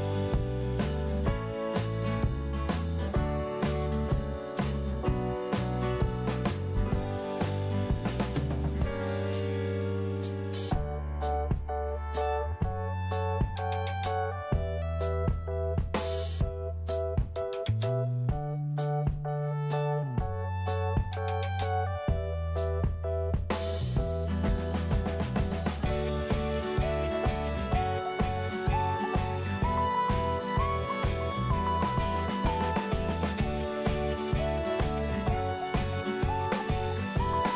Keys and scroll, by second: 0.4-1.4 typing, 16.2 1, 16.3 Return, 17.5-18.5 typing, 24.9-26.9 typing, 27.5 alt+q, 30.1 alt+q, 32.3 alt+q, 34.1-35.3 typing.